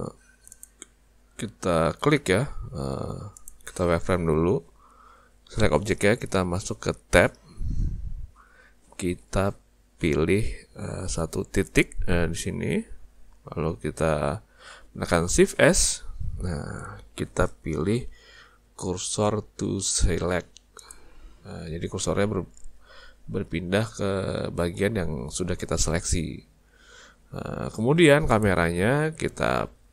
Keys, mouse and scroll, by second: 0.5 click, 2.2 z, 7.2 Tab, 11.7 click, 15.6 shift+s, 27.1 Tab, 28.3 click.